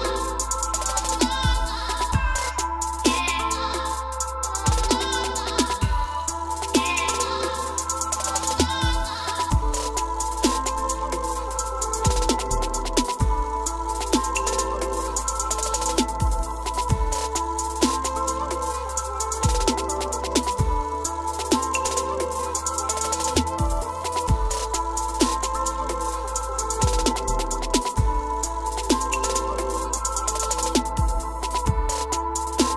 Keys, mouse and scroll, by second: 0.5-1.2 scroll up 7, 1.6 scroll up 1, 1.7 Escape, 4.7-5.8 drag, 6.5-8.0 scroll, 8.0 scroll, 8.5 click, 8.8-9.6 scroll down 10, 9.6-10.7 scroll up 4, 10.7 scroll, 10.7 e, 12.8 click, 14.2 click, 15.4 click, 17.8 click, 20.9 click, 22.0 click, 22.4-22.9 scroll, 23.1 middle click, 23.2 middle click, 23.3 middle click, 24.0 m, 25.3 click, 28.0 click, 28.6 scroll down 1, 28.7 middle click, 29.5-30.3 middle click, 30.8 click, 32.6 m.